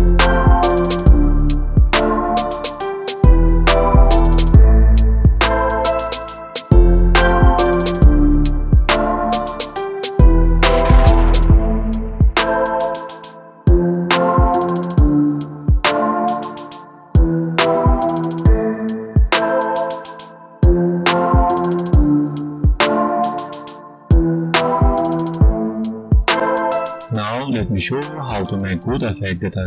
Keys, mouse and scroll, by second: 0.2-1.0 scroll down 4, 0.6 right click, 1.3 scroll up 1, 2.0 click, 2.6 click, 3.4 click, 4.1 right click, 7.2 click, 7.5 right click, 8.2-9.2 scroll down 1, 9.4 space, 10.4 g, 15.5 click, 16.4-16.7 scroll down 1, 16.7 space, 17.2 click, 19.3 right click, 22.5-24.2 scroll down 3, 24.6 space, 25.8 space.